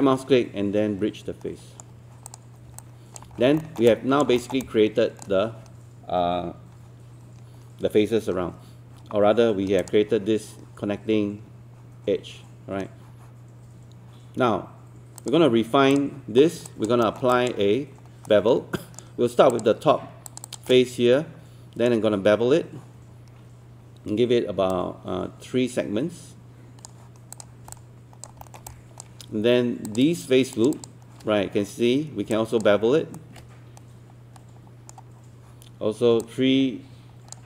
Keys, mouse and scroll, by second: 2.3 click, 2.8 alt+click, 3.4 scroll down 1, 3.6 alt+middle click, 3.9 alt+click, 4.7 alt+click, 7.3-7.7 scroll up 1, 9.8 click, 16.7 alt+click, 17.1 middle click, 17.3 alt+click, 18.3 right click, 19.5 click, 20.3 shift+click, 20.8-22.8 shift+right drag, 24.7-27.3 drag, 27.7 alt+click, 28.4 alt+middle click, 28.7 alt+click, 29.9 click, 30.5 shift+click, 30.8 shift+click, 33.2-35.8 shift+right drag, 36.2 click.